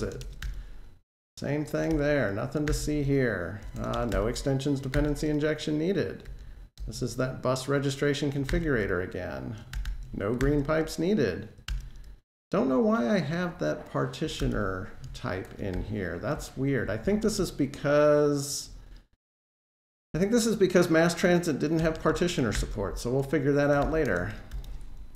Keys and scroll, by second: 1.7 Delete, 2.5 alt+shift+Page_Down, 3.9 alt+shift+Page_Down, 3.9 Delete, 4.7 alt+shift+Page_Down, 6.1 alt+super+Right, 6.6 super+v, 8.3 alt+shift+Down, 9.5 super+x, 11.5 alt+Return, 22.4 alt+shift+Page_Down, 23.6 super+x.